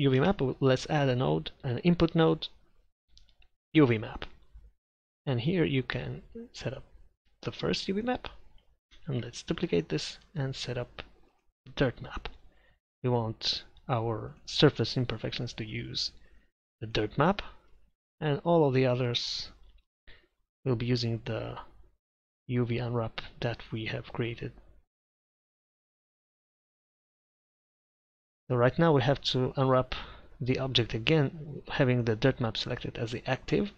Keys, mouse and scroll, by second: 0.2 shift+a, 5.2-9.6 drag, 9.1 shift+d, 10.1-17.3 drag, 29.7 Tab.